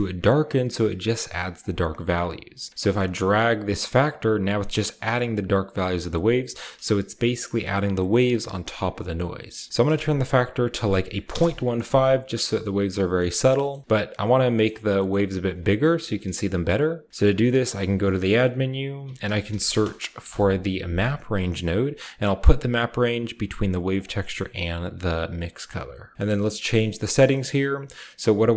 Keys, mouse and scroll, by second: 1.4-9.6 drag, 9.6-10.8 middle drag, 9.6-10.7 scroll up 1, 9.7-10.8 drag, 10.7-11.0 scroll up 1, 10.8 typing, 11.1 Return, 12.0-12.8 scroll up 1, 12.8 scroll down 1, 13.0-14.4 middle drag, 15.2 click, 15.7 typing, 17.1 shift+a, 17.4 click, 18.6-20.3 typing, 22.1 click, 23.8 click, 24.0 middle click, 24.3-27.2 drag, 25.5-27.2 scroll up 1, 27.2-28.5 scroll up 1.